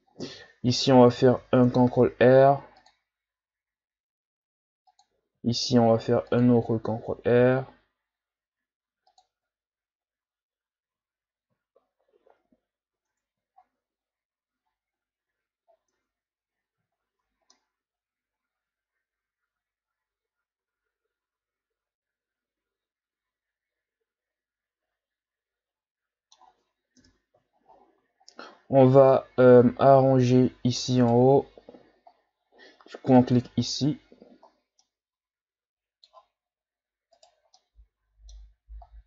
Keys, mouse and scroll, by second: 0.1-0.6 ctrl+scroll up 2, 0.6 Tab, 1.8 ctrl+r, 5.3 ctrl+r, 9.3 Tab, 10.6 scroll down 1, 10.8 a, 11.8-12.3 shift+scroll up 2, 12.3 Tab, 12.9 Tab, 13.5-14.7 shift+scroll up 11, 14.7-15.3 ctrl+scroll up 2, 15.3 Tab, 15.7 scroll down 2, 15.9 Tab, 16.5-17.5 scroll down 8, 17.5-20.5 middle drag, 27.0 KP_1, 27.7-29.0 scroll up 9, 29.0 shift+scroll down 3, 29.3-29.6 scroll up 1, 31.0 right click, 33.1 click, 34.5 scroll down 1, 34.8-37.1 middle drag, 37.1 right click, 37.6-39.0 middle drag.